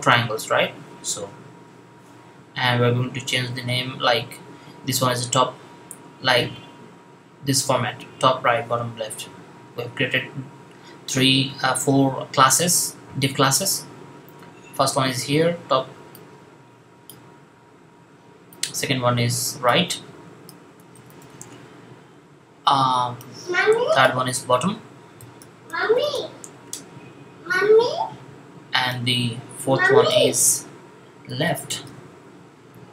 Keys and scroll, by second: 20.4-21.1 typing, 24.8-26.0 typing, 30.9-31.7 typing.